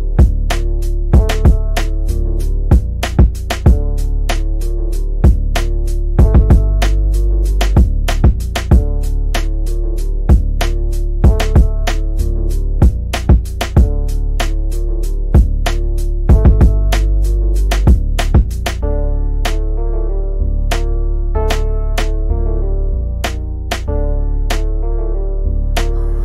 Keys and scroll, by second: 0.5 c, 2.5 shift+Page_Down, 3.1 f.